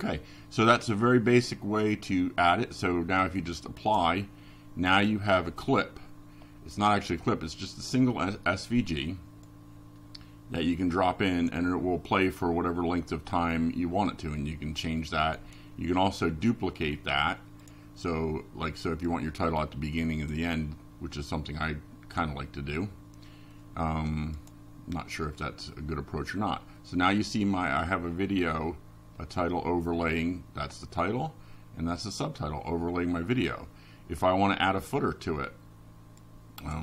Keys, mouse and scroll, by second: 1.1 right click, 3.3 click, 4.6-5.8 drag, 9.4 click, 20.3 click, 22.8 click, 23.7 click, 25.3 click, 29.9 click, 30.6 click, 31.3 click, 32.2 click, 33.3 click, 34.2 click.